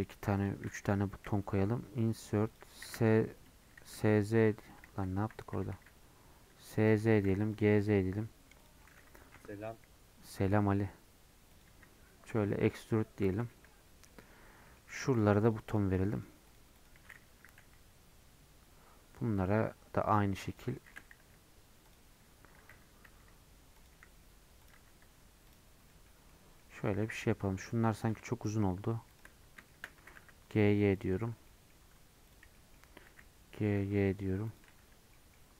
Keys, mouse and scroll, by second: 0.5 shift+click, 1.2 |, 4.9 ctrl+z, 5.5 s, 8.8 middle click, 13.2 middle click, 13.9 scroll up 1, 14.1-15.2 middle drag, 15.2 click, 15.8 shift+click, 16.2 shift+click, 16.6 shift+click, 16.9 shift+click, 17.6 |, 20.7 middle click, 21.3 e, 24.8 Tab, 24.9-25.5 scroll down 11, 25.5 click, 25.7 scroll up 1, 25.9 middle click, 26.8 scroll up 1, 27.0 middle click, 27.3 Tab, 27.7-28.0 scroll up 1, 28.0 click, 29.2 shift+click, 29.4 scroll up 3, 29.7 shift+middle click, 30.1 g, 31.2 Tab, 31.3 scroll down 4, 31.5 middle click, 31.7 scroll up 2, 32.3 click, 32.6 middle click, 33.2 g, 34.7 Tab, 34.9 scroll down 1, 35.1-35.5 middle drag.